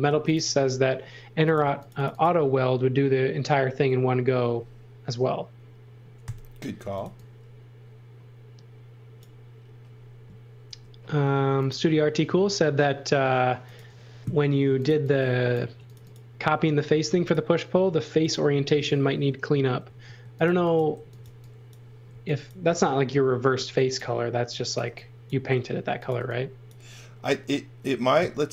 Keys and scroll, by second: 0.1 b, 1.6 space, 6.2-7.5 typing, 10.6 m, 14.4-15.6 typing, 17.0 b, 19.8-23.5 typing, 24.8 v, 25.8 x, 26.1 v.